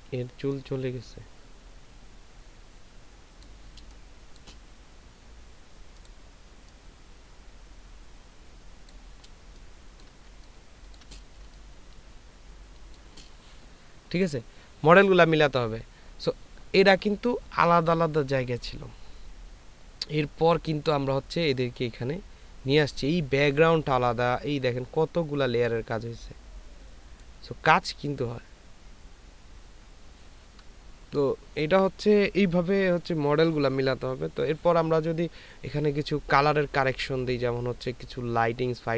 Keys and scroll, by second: 0.0 [, 0.2 [, 3.9 space, 9.8 ctrl+space, 11.4 ctrl+space.